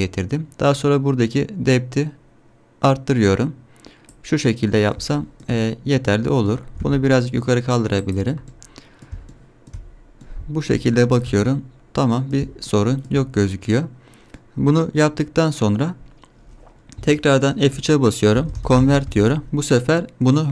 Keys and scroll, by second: 6.7 g, 17.1 F3.